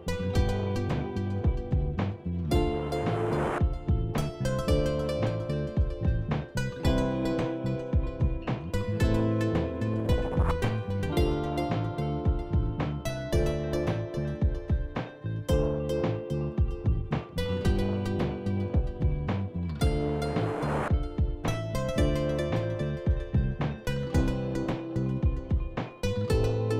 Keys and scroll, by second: 14.3 Delete, 14.6 f, 17.7 f, 21.2 c.